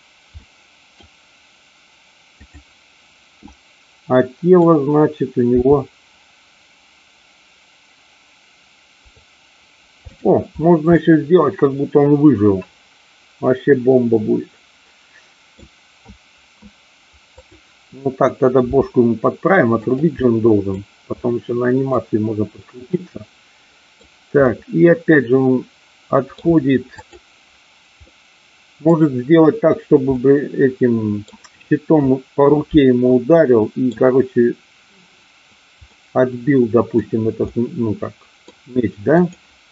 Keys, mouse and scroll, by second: 0.4-1.0 scroll up 1, 3.4-4.6 middle drag, 5.6 r, 10.2 click, 11.0-15.7 middle drag, 17.3-18.4 drag, 18.6 r, 19.8 click, 20.3 middle click, 21.3 middle click, 22.9-24.0 middle drag, 24.6-26.3 middle drag, 26.9 click, 28.0-29.0 middle drag, 30.0-31.4 middle drag, 33.3 middle click, 35.8-36.9 middle drag, 37.6-38.6 middle drag, 39.2-39.7 drag.